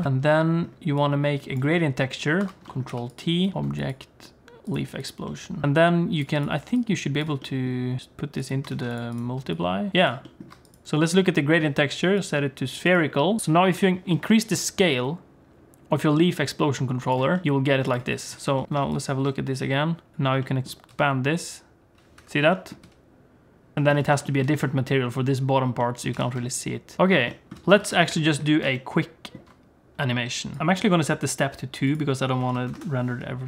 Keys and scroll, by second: 0.0 alt+a, 0.0 ctrl+s, 0.0 shift+BackSpace, 2.4 ctrl+t, 2.9 g, 8.7 shift+d, 9.9 g, 13.4 s, 14.1 s, 17.5 s, 20.9 s, 22.8 s, 23.8 alt+shift+z, 23.9 alt+shift+z, 26.2 g, 27.0 z, 27.5 alt+a, 27.8 ctrl+s, 32.6 0.